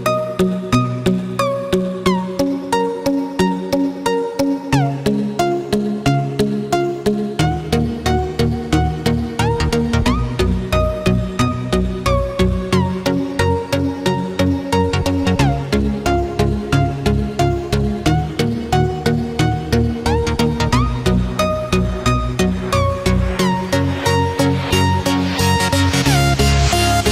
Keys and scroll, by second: 0.6 ctrl+f, 1.0 ctrl+d, 2.4 ctrl+-, 4.3 ctrl+=, 5.9 ctrl+-, 14.0 ctrl+f, 14.2 ctrl+d, 20.3 ctrl+f, 20.6 ctrl+d, 24.5 ctrl+d, 25.5 ctrl+-, 26.4 ctrl+0.